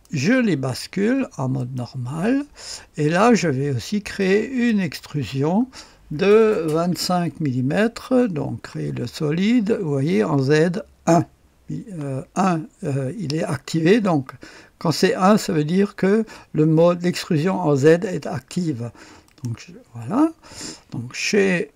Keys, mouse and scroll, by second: 1.5 click, 4.2 click, 5.0 click, 6.6 KP_2, 6.9 KP_5, 19.2 click.